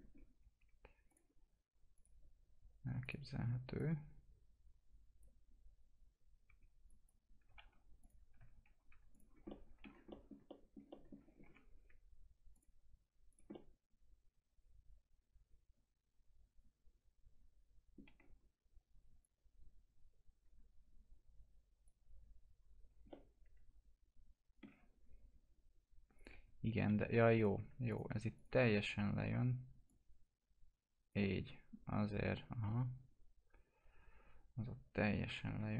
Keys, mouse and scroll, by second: 0.1-0.6 scroll up 1, 1.0-6.4 drag, 6.4 1, 6.8 click, 7.5 ctrl+t, 8.0 click, 8.4 ctrl+z, 9.1 click, 9.2 scroll down 1, 9.4 alt+middle click, 9.9 scroll down 1, 10.1 middle click, 10.5 alt+middle click, 11.4 scroll up 1, 11.5 F4, 12.5 click, 13.5-18.5 alt+middle drag, 18.5-19.2 scroll up 1, 19.2-23.1 drag, 23.1 alt+middle click, 26.3 typing, 27.4 click, 27.9 ctrl+click, 28.6 alt+middle click, 29.9-31.6 drag, 31.6-35.7 alt+middle drag.